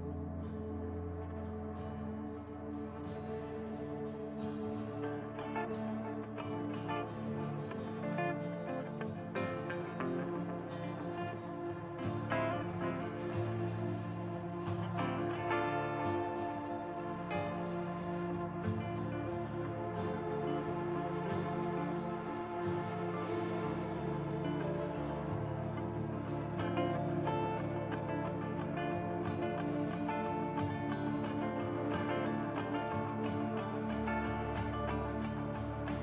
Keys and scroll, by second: 2.1 alt+x, 3.5 alt+x, 3.7 f, 4.6 alt+x, 4.9 b, 7.9 f, 8.9 alt+x, 12.3 e, 13.0 q, 15.5 alt+x, 16.2 alt+x, 16.6 f, 19.4 t, 19.8 f, 21.3 f, 21.9 1, 22.9 shift+r, 23.8 Delete, 25.3 shift+r, 25.8 shift+r, 27.3-28.7 typing, 30.9 f, 33.6 t, 34.0 F3.